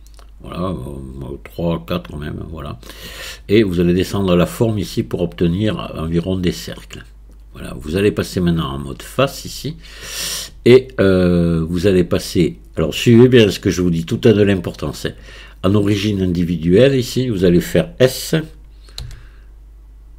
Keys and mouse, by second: 2.0 click, 3.7-7.4 drag, 8.9 click, 15.1-16.7 drag, 19.0 s.